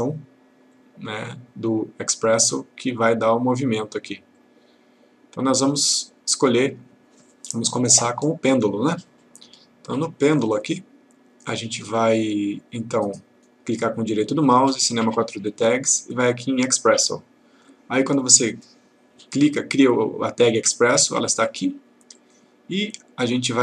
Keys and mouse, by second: 13.5 right click, 16.9 click, 22.2-23.6 click.